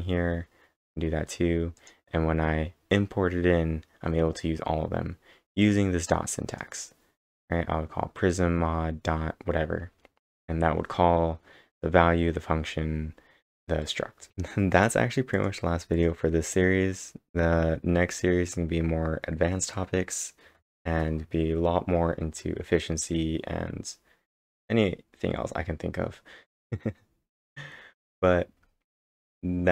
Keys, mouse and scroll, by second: 1.8 click, 5.4-6.1 typing, 5.6 click, 6.5 click, 14.3 click.